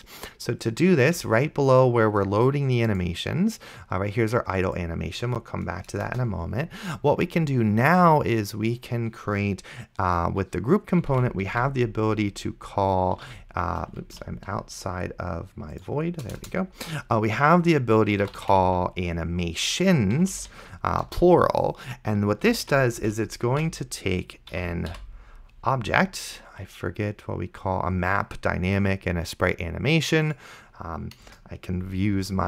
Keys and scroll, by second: 6.2 Return, 11.1-13.6 typing, 14.4 ctrl+z, 16.3 Return, 17.9-19.1 typing, 20.2 Down, 21.1 Return, 22.5 space, 22.7 =, 23.0 space, 23.8 shift+[, 24.6 End, 24.9 ;, 31.5 Return.